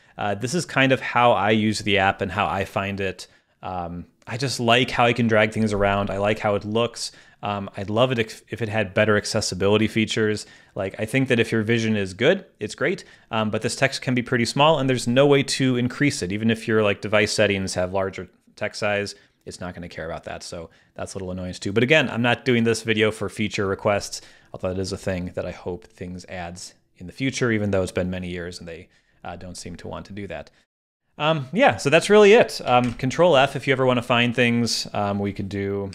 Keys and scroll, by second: 32.9 super+f.